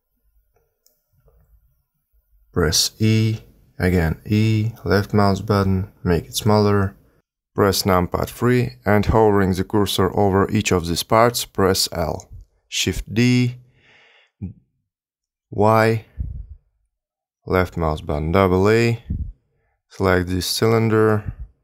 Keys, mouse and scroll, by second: 1.7 3, 2.3 click, 3.0 e, 4.0 s, 5.2 e, 6.2 s, 9.7-12.4 typing, 13.6 shift+d, 18.5 a, 18.6 a, 19.1 l, 20.0 g, 21.4 r.